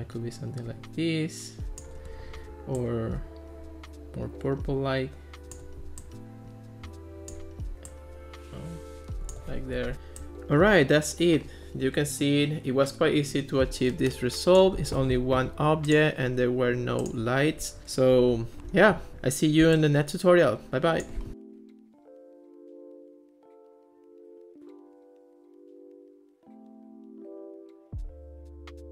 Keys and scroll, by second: 9.8 Escape.